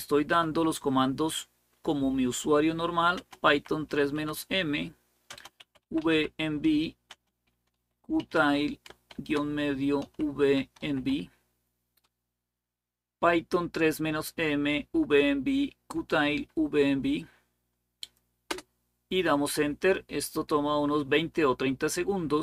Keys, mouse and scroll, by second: 0.1 typing, 2.9-3.9 typing, 5.1-11.4 typing.